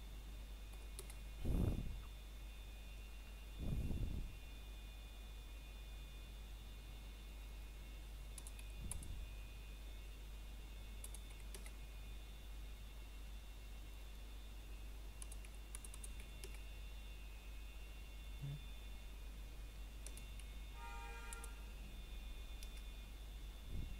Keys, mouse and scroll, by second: 0.9 KP_Enter, 2.6-5.2 scroll down 1, 8.3 click, 13.1 KP_Enter, 15.8 click, 18.9 KP_Enter, 21.0 click.